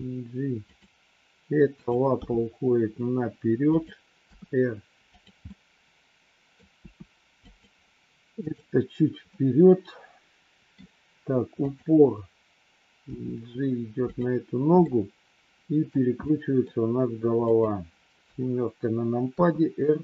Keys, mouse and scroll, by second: 1.7 click, 2.5 g, 4.2 r, 5.4-6.5 middle drag, 6.7 r, 8.4 click, 9.3-10.7 middle drag, 11.5 click, 13.0 g, 14.7 scroll up 1, 14.9 middle click, 16.2 scroll up 1, 16.3 middle click, 16.5 scroll down 1, 18.2 KP_7, 19.3 r.